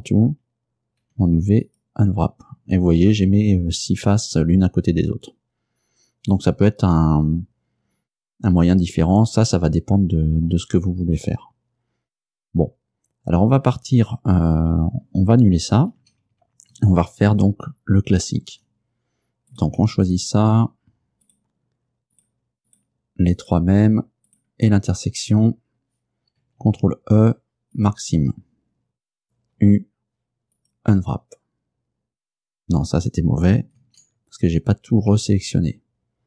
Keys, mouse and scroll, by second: 1.1 u, 1.7 click, 16.1 ctrl+z, 18.2 ctrl+z, 19.6 shift+right click, 21.3 shift+right click, 22.2 shift+right click, 22.8 shift+right click, 23.4 shift+right click, 24.4 shift+right click, 26.7 ctrl+e, 27.8 click, 29.7 u, 30.6 click, 33.9 ctrl+z, 35.0 a.